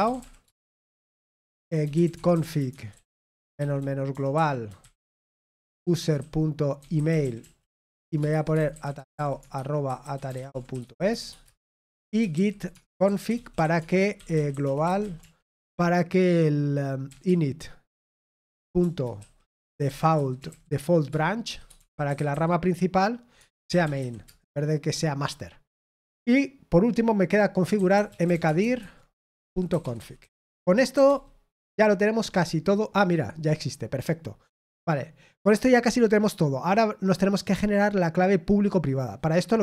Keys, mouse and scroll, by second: 0.0-1.8 typing, 6.9-15.4 typing, 21.1-22.5 typing, 28.9-30.2 typing.